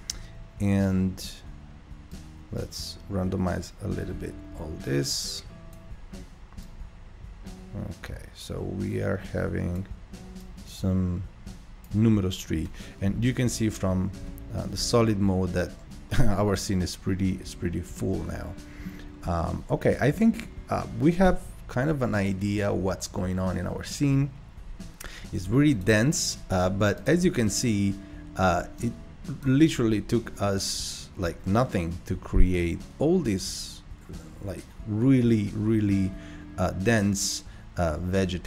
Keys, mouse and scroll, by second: 6.9-10.0 drag, 10.5-12.4 drag, 12.4-13.2 scroll down 2, 13.2 n, 14.4 shift+middle click, 14.8-15.2 shift+scroll up 2, 15.4-17.6 middle drag, 17.6-18.1 scroll up 1, 18.1-19.3 middle drag, 19.3 scroll down 1, 19.6-22.4 middle drag, 22.4 click, 25.8-26.6 drag, 27.4-27.7 drag, 28.9-31.9 drag.